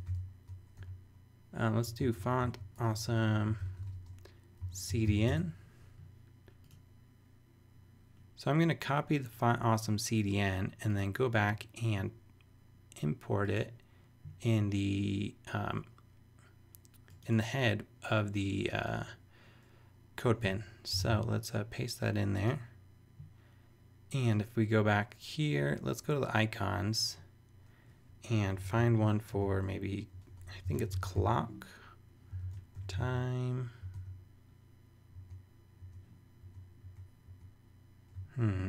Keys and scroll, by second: 0.0-5.5 typing, 20.4 Return, 20.9 super+Return, 21.0 super+v, 29.3-33.5 typing, 32.4 super+a, 33.8 super+e, 33.9 super+g, 35.1 super+g.